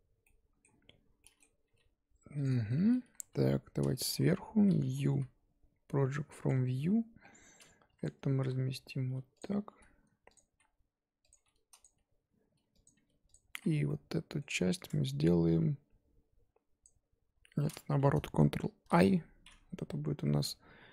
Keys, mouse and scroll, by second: 0.2-1.6 middle drag, 1.6 g, 2.5 scroll down 4, 2.7 middle click, 3.2 a, 4.1 KP_7, 6.4 u, 8.0 click, 8.4 r, 9.7-12.9 typing, 13.8 middle click, 14.5 3, 16.8 click, 18.9 ctrl+i.